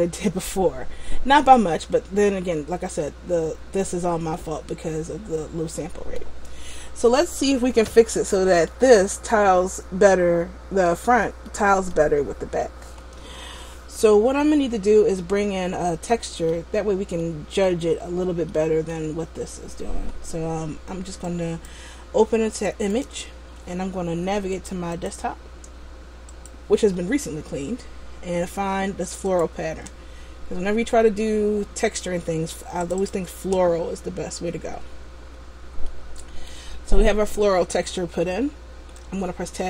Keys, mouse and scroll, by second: 1.6 scroll up 2, 4.4 middle click, 8.0 middle click, 11.6 middle click, 15.5 middle click, 17.3 middle click, 18.6 middle click, 21.4 click, 35.0 click, 35.6-36.0 scroll down 1, 36.0 middle click, 37.5-38.0 scroll down 1, 39.5 Tab.